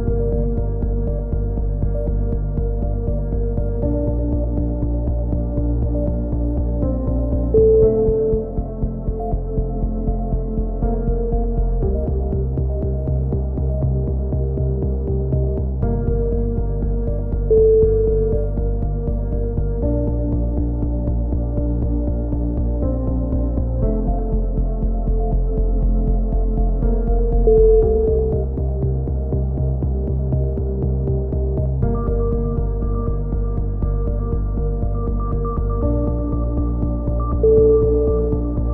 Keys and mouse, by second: 0.4-1.8 right drag, 1.7 shift+q, 2.0 a, 2.1 z, 2.3-3.3 right drag, 3.2-8.0 typing, 3.9-4.9 right drag, 5.8 click, 6.2 click, 9.1 click, 10.8 z, 11.2 right click, 11.4 z, 13.4 z, 13.5 click, 15.8 right click, 15.8 f, 16.0 a, 16.0 click, 17.5 ctrl+z, 18.7 right click, 19.0 f, 19.1 a, 19.6 click, 20.0 right click, 20.1 z, 20.6 f, 20.9 z, 20.9 a, 21.0 click, 23.1-24.3 right drag, 24.3 shift+q, 24.6 a, 24.7 z, 24.8 click, 25.7-27.2 drag, 25.9-26.9 right drag, 26.9 x, 27.2 z, 27.4 click, 28.6 KP_3, 28.8 z, 29.0 click, 31.0 click, 31.6 z, 31.9 click, 32.4-33.7 right drag, 32.9 z, 34.0 a, 34.2 z, 34.3 z, 34.4 click, 37.0 right click, 37.5 alt+m, 37.8 right click, 38.5 alt+m.